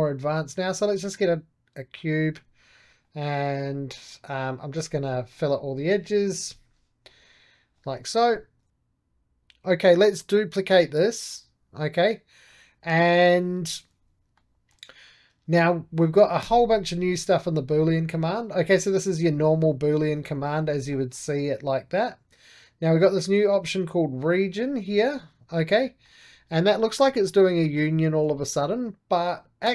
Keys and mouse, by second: 0.0-3.5 drag, 3.5 right click, 3.6-4.9 drag, 4.9 2, 5.2-6.3 drag, 6.3 b, 6.9 click, 7.7 right click, 8.6 middle click, 8.7 shift+d, 10.0-13.4 drag, 13.4 right click, 14.2-16.3 middle drag, 16.3 q, 16.8 click, 17.6-23.5 middle drag, 24.3-25.7 drag, 25.7-29.5 middle drag, 29.5 click, 29.6-29.7 right drag.